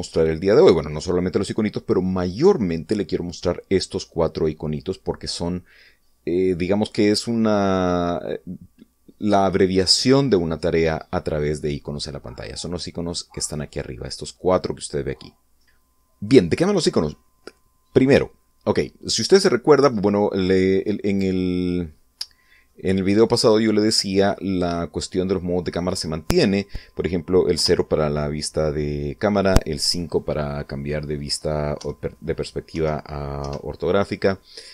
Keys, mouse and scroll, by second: 19.0-19.3 scroll down 1, 19.5 scroll up 1, 19.9-20.6 scroll down 2, 20.6-22.5 middle drag, 22.6-22.9 scroll up 1, 27.2 0, 29.5 5, 31.4 5, 32.4 5, 33.0 5.